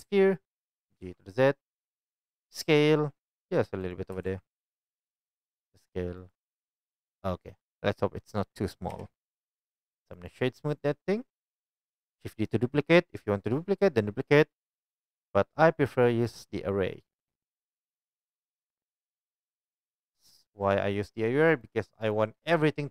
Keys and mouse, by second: 0.0-0.8 right drag, 0.0 shift+a, 0.8 g, 2.7 s, 4.1 g, 5.6 s, 8.9-12.0 right drag, 8.9 KP_1, 12.0-16.3 drag, 16.4-17.1 drag.